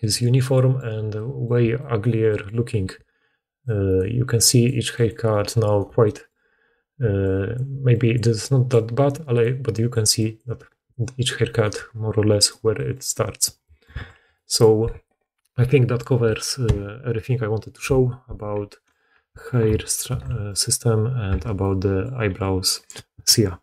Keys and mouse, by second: 2.8-5.1 d, 5.7 d, 6.9-8.9 drag, 6.9-8.9 right drag, 6.9-12.5 typing, 9.8 click, 9.8 middle click, 9.8 right click, 10.0 click, 10.0 middle click, 10.0 right click, 13.8 alt+a, 19.5 alt+h, 20.0 alt+a, 20.4-23.2 drag, 21.2 h.